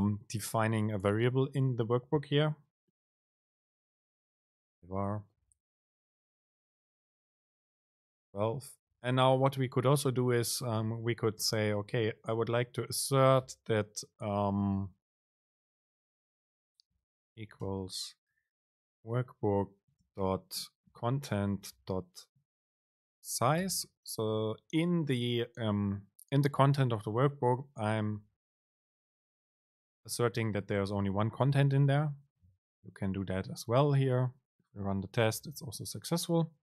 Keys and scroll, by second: 5.5 BackSpace, 8.1 Down, 9.1 Up, 9.2 Down, 10.1 Up, 10.7 End, 11.0 Return, 11.5 super+space, 19.3 super+space, 29.1 super+Right, 29.9 Right, 30.8 Up, 33.6 super+r.